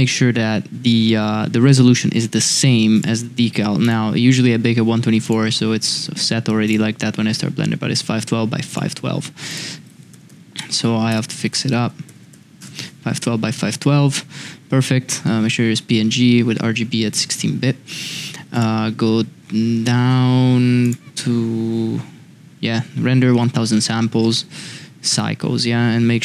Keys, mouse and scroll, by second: 9.6-13.2 drag, 18.5 click.